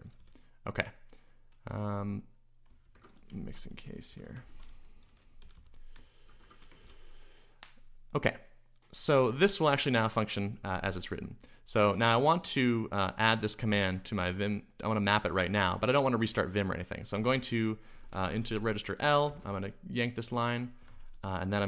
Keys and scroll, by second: 0.0-0.7 typing, 2.7-6.7 typing, 6.8 ctrl+h, 11.7 ctrl+s, 13.7 typing, 16.5 typing, 18.0-19.7 typing.